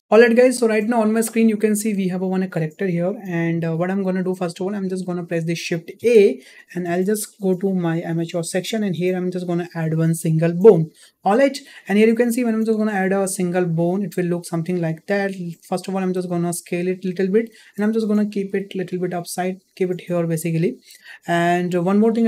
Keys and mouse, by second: 0.6 click, 5.9 shift+a, 13.0 shift+middle click, 13.8 s, 17.7 g.